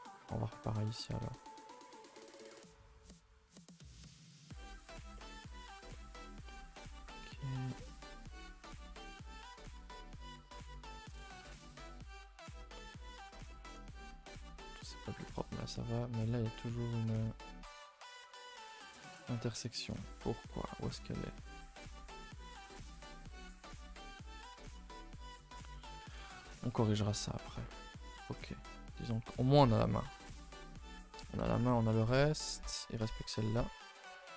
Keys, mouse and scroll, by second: 0.2-1.4 middle drag, 1.4 alt+shift+click, 1.7 middle click, 2.3 alt+shift+click, 2.8 alt+shift+click, 3.0-8.7 middle drag, 8.7 shift+click, 9.5 right click, 9.8 a, 11.4 u, 12.0 a, 12.1 a, 16.3 click, 16.8 click, 17.1 g, 18.7 g, 19.7 a, 19.9 a, 20.0-22.8 middle drag, 22.8 ctrl+z, 23.3 a, 23.5 a, 24.0 click, 24.4 g, 26.0 a, 26.2 a, 27.1 middle drag, 27.4 a, 27.5 a, 28.0 middle click, 28.5 Tab, 28.8 Tab, 29.7 alt+h, 30.1-31.6 typing, 30.6 scroll down 2, 31.7-34.0 middle drag, 34.0 l.